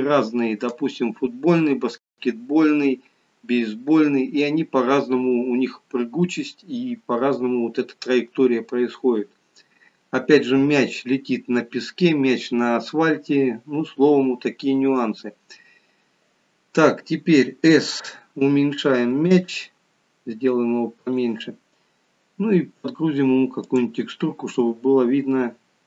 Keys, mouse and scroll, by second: 18.0 s, 23.6 click.